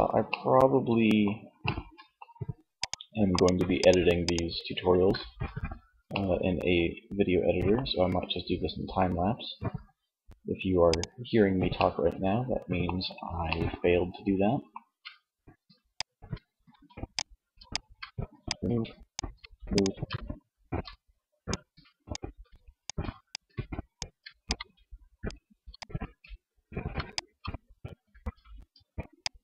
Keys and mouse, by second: 6.2-10.9 middle drag, 11.1 middle click, 15.2 Tab, 15.8 Tab, 16.4 a, 16.7 a, 17.2 Tab, 17.6 Tab, 18.6 Tab, 18.9 Tab, 19.7 Tab, 20.4 Tab, 21.3 Tab, 22.1 Tab, 23.1 Tab, 23.7 Tab, 24.3 Tab, 25.2 Tab, 25.8 Tab, 26.5 Tab, 27.3 Tab, 27.6 Tab, 27.9 Tab, 28.3 Tab, 29.3 Tab.